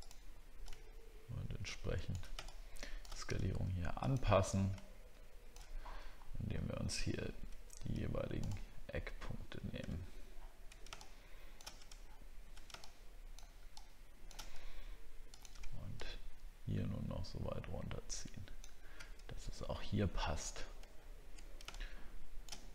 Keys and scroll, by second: 5.7 alt+scroll up 1, 6.5-6.8 alt+scroll up 1, 9.9 alt+scroll down 1, 12.0 alt+scroll down 1, 21.0 alt+scroll down 1.